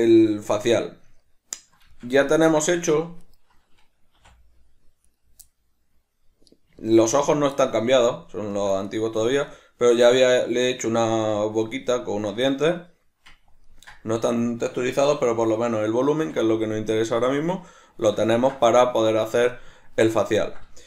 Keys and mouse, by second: 2.8 Tab, 3.2 right click, 4.2 h, 5.0 right click, 5.4-7.2 middle drag, 7.2 right click, 7.6-8.8 middle drag, 8.8 right click, 9.3-17.4 shift+middle drag, 16.2 alt+h, 17.4 right click, 18.3-20.8 ctrl+middle drag.